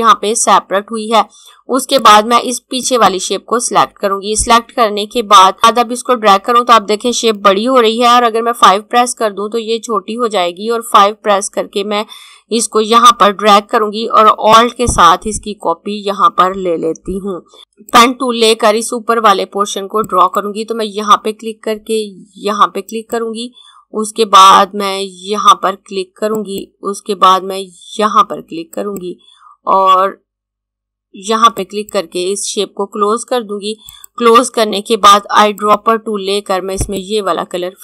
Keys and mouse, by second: 1.8 click, 5.6 click, 8.3-10.9 typing, 14.2 alt+5, 17.2 click, 17.8 click, 22.6 click, 25.9 click, 31.0 click.